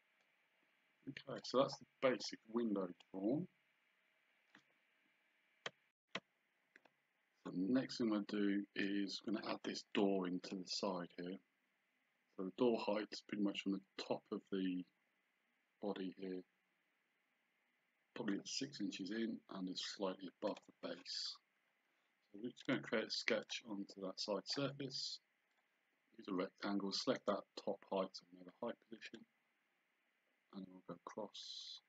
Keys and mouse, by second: 3.1 click, 8.0 click, 10.0 click, 20.5 click, 22.7 click, 25.6 click, 29.1 click.